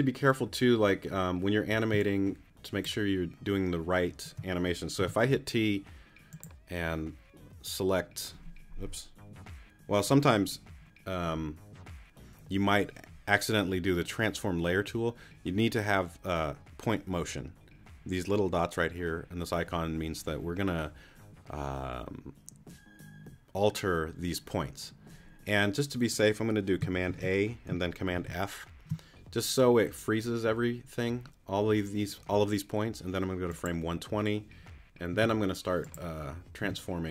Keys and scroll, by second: 1.9 space, 5.0 t, 27.1 super+a, 28.1 super+f, 35.1 t, 36.6 t.